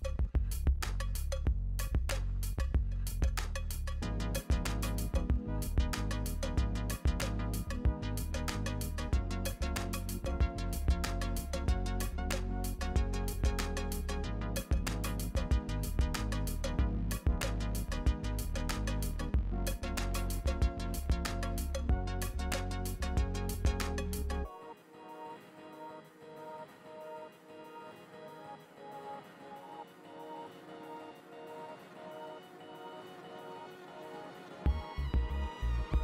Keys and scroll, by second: 0.4 Return, 9.4 Return, 9.7 space, 9.8 space, 9.8 space, 10.0 Return, 17.1 Return, 17.3 r, 17.4 Return, 24.3-25.2 typing, 31.4-32.3 typing.